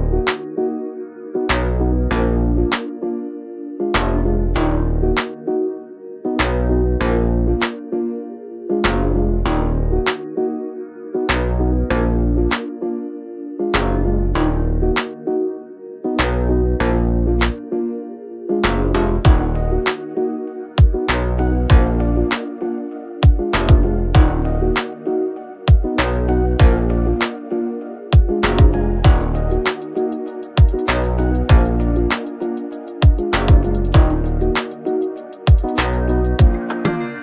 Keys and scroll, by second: 6.6 ctrl+g, 9.3-11.6 typing, 12.4 Return.